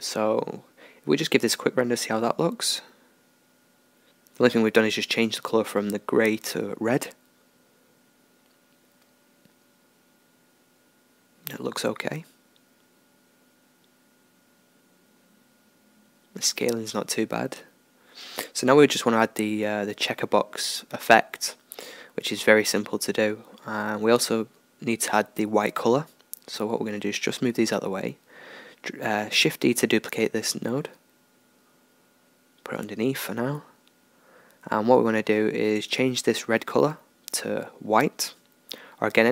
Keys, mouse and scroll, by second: 1.5-4.1 drag, 9.9-21.9 middle drag, 21.9-33.0 drag, 30.0-33.0 middle drag, 34.0-36.3 middle drag, 36.3-36.7 scroll up 1, 36.7-39.3 drag.